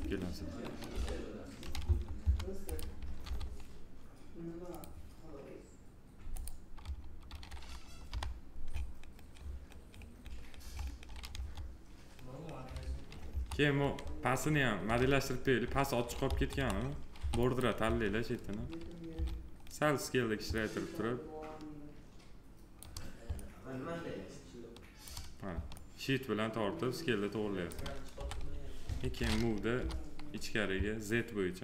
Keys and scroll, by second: 0.7 f, 3.0 alt+r, 7.8 p, 11.1 F3, 13.0 F3, 14.7 alt+q, 18.9 r, 27.9 f.